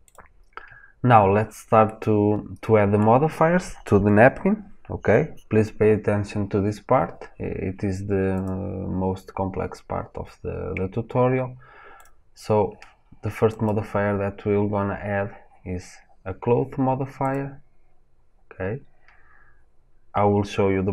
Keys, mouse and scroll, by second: 0.0 click, 1.8-8.4 middle drag, 8.4 click, 17.2-20.9 drag.